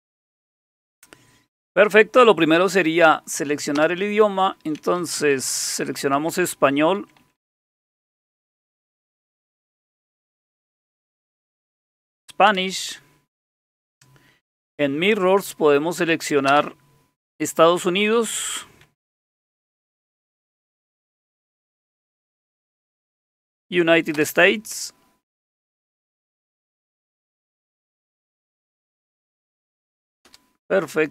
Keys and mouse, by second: 3.8 Return, 4.8 Down, 5.0 Down, 5.2 Down, 5.3 Down, 5.5 Down, 5.8 Down, 6.0 Down, 7.0 Down, 7.2 Down, 7.4 Down, 8.4 Up, 8.6 Up, 8.8 Up, 9.0 Down, 9.2 Down, 9.4 Down, 9.6 Down, 10.0 Down, 10.2 Down, 10.6 Down, 11.0 Down, 11.6 Up, 12.5 Return, 14.7 Return, 16.5 Return, 18.3 Up, 18.8 Up, 19.4 Up, 20.2 Up, 21.6 Down, 21.8 Down, 21.9 Down, 22.8 Up, 24.2 Return, 28.2 Down, 28.4 Down, 30.2 Return.